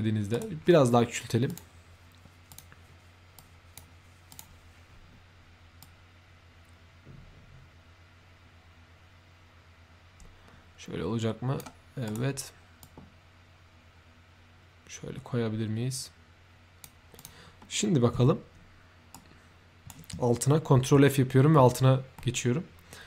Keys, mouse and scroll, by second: 0.2 right click, 1.4 click, 2.4 click, 3.3 click, 4.2 click, 5.7-11.5 drag, 12.0 right click, 12.7-16.7 drag, 17.1 click, 17.5 middle click, 18.1 3, 19.1-19.8 right drag, 20.8 ctrl+f, 22.1 middle click, 22.2 f.